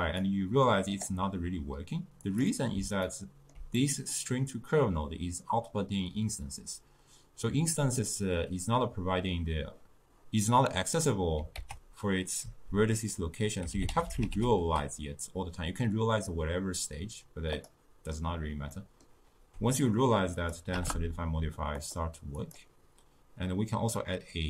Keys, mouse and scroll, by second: 3.2-6.9 ctrl+middle drag, 11.7 ctrl+a, 18.9-20.5 middle drag, 20.5-22.5 drag.